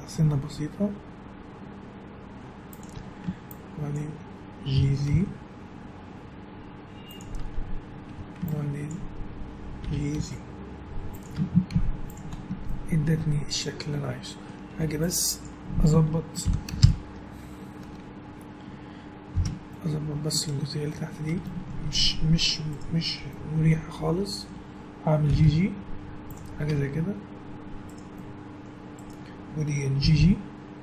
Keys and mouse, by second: 2.9 a, 4.7 g, 8.1 a, 8.4-9.8 drag, 9.8 g, 11.3 Tab, 11.7 z, 12.4 middle click, 13.1 middle click, 14.7 Tab, 15.3-16.4 right drag, 16.4 ctrl+l, 16.8 shift+h, 19.3 KP_Divide, 21.7 middle click, 21.9 click, 22.7 right click, 23.0-24.3 drag, 23.0 middle click, 23.7 right click, 24.3 middle click, 25.3 g, 26.9 click, 27.9 click, 27.9 right click, 28.6-30.0 middle drag, 30.0 g.